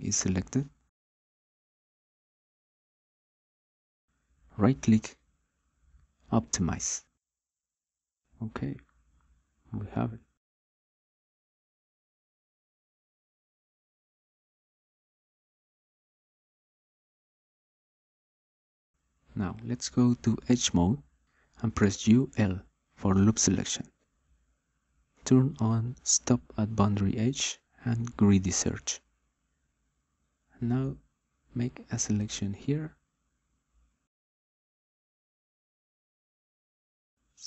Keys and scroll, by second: 22.1 u, 22.8 l.